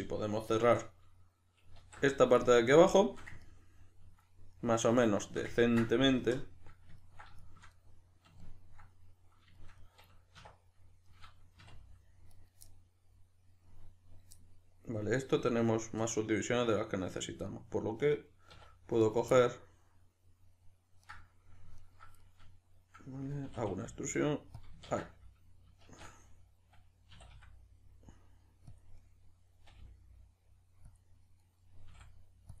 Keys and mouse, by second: 1.8 alt+q, 6.2 KP_Decimal, 10.4 1, 11.6 2, 12.3 right click, 12.7-18.5 middle drag, 18.5 1, 19.0 right click, 19.3-21.1 middle drag, 21.1 right click, 21.8 ctrl+right click, 22.2-24.6 middle drag, 23.5 e, 24.6 click, 24.9 ctrl+z, 25.9 shift+Tab, 27.1 e, 28.8 click, 29.0-31.0 middle drag, 29.7 g, 31.0 click, 31.4-32.6 middle drag, 31.8 s.